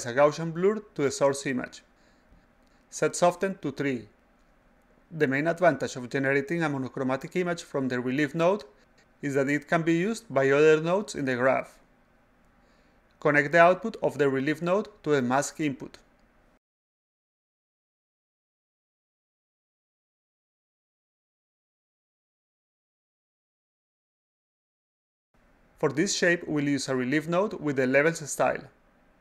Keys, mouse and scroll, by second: 3.0 click, 3.3 click, 15.9 click, 16.8-19.8 drag, 22.1 click, 22.8 click, 23.0 click, 25.0 click, 25.2 click, 28.8 click, 29.0 click.